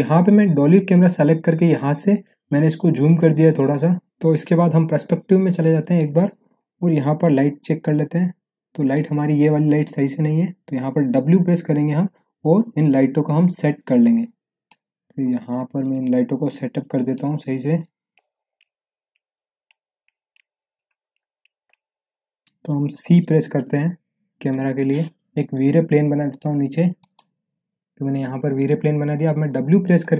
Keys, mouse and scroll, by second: 2.4-3.4 scroll down 1, 3.4-4.0 click, 4.7 p, 5.2-5.6 scroll down 1, 5.6-6.2 middle click, 6.2 scroll up 1, 7.2-11.5 middle drag, 11.5 w, 12.9-13.9 drag, 14.6-17.1 alt+middle drag, 18.1-19.1 click, 18.7 alt+middle click, 19.3 e, 19.6-20.0 click, 20.7-21.1 middle click, 21.4-21.7 click, 22.1-22.7 alt+middle drag, 24.5 c, 25.3 scroll down 1, 26.3 click, 28.1-29.3 scroll down 1, 29.3 w, 30.0-30.1 click.